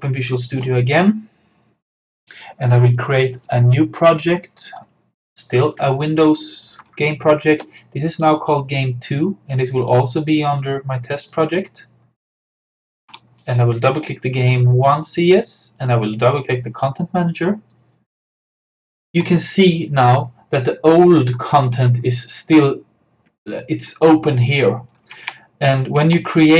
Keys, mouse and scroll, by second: 3.0 click, 6.7-10.6 drag, 14.9-21.1 drag, 25.2 alt+Tab.